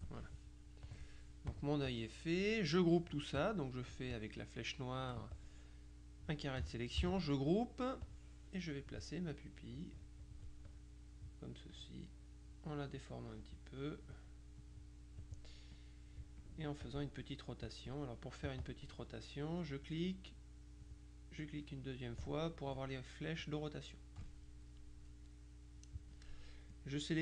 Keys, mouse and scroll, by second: 1.0 click, 1.6 click, 4.2 click, 5.1 F1, 5.4-6.9 drag, 7.1 ctrl+g, 8.1 click, 9.6-10.9 drag, 11.8-13.9 drag, 14.7 click, 15.8 click, 16.9 click, 17.8 click, 18.6 click, 19.6 click, 21.0 click, 23.5 click, 25.8 middle click, 26.8 click.